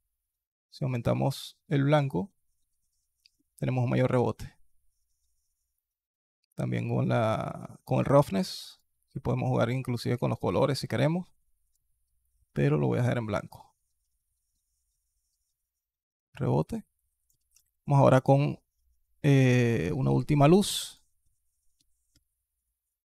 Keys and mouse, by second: 4.0 click, 5.6-7.8 drag, 8.1 click, 8.5 click, 17.7 shift+a, 21.9 ctrl+KP_3.